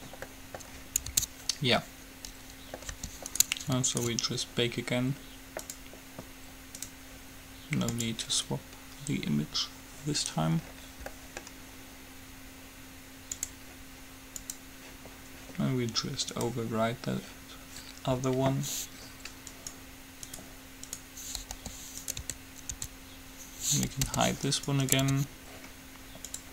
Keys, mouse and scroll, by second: 0.6-2.0 middle drag, 1.3 Tab, 3.0 g, 4.1-5.9 right drag, 5.9-10.1 drag, 10.9 middle click, 13.6-14.7 drag, 17.1-18.4 drag, 19.7-22.3 right drag, 21.7 g, 22.4 Tab, 22.9 Tab, 24.2 h, 25.3 Tab.